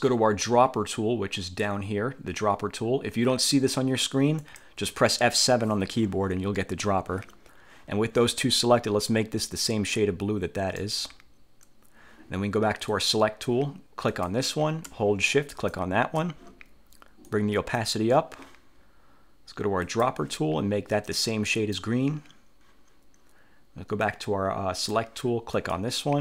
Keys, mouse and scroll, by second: 4.5 click, 6.0 F1, 6.8 F7, 9.6-11.1 drag, 13.0 click, 14.2 click, 15.6 shift+click, 17.4 click, 20.0 click, 21.2 click, 24.2-25.2 drag, 25.7 click.